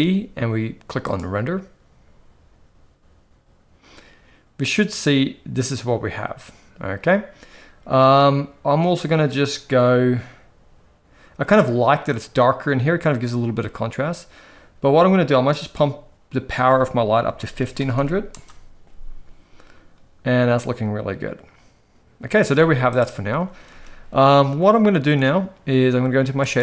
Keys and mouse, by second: 15.6-18.3 drag, 17.9 0, 22.4 z, 23.5 ctrl+s, 23.7 ctrl+s.